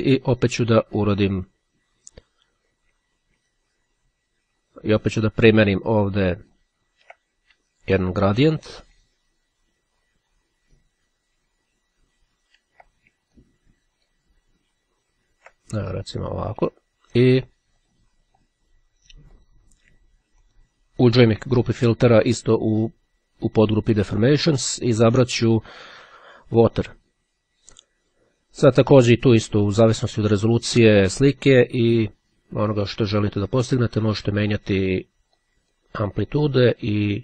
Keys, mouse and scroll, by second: 3.7-7.2 ctrl+drag, 10.9-12.5 ctrl+drag, 13.5-14.7 drag, 17.5-18.6 drag, 19.5 click, 20.6 click, 26.0 click, 28.9 click, 34.9-36.4 drag, 36.7 click.